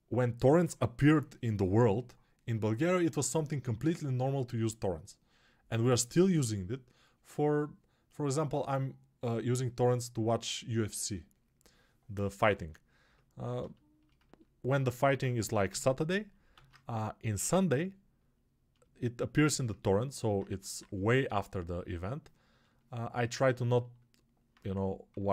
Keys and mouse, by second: 14.1-25.3 ctrl+alt+drag, 15.6 g, 16.6 alt+q, 20.4 1, 25.0 3.